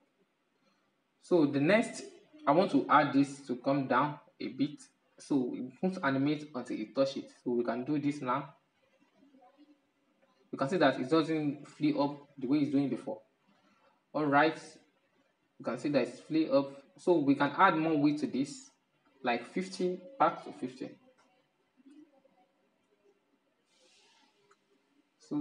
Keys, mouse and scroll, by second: 2.8 right click, 4.4-7.5 drag, 8.3 click, 12.9-18.0 drag, 18.4-21.4 drag, 21.9-25.4 drag.